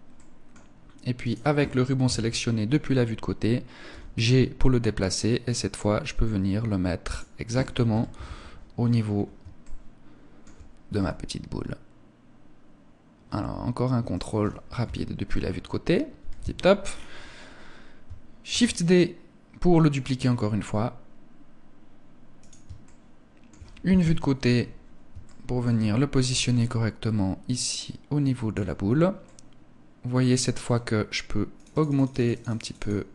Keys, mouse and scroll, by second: 1.5 KP_3, 3.4 g, 6.6 click, 7.4 KP_1, 8.5 scroll up 4, 9.1 shift+middle click, 10.4 g, 13.7 click, 14.3 KP_3, 15.6 KP_1, 16.3 scroll down 1, 17.4 scroll down 5, 18.0 shift+d, 22.0 click, 22.3 shift+middle click, 23.5 KP_3, 24.7 shift+middle click, 25.8 g, 28.0 click, 28.4-28.9 scroll up 2, 28.7 middle click, 31.0 click, 31.5 click, 31.6 click, 32.0 click, 32.1 click.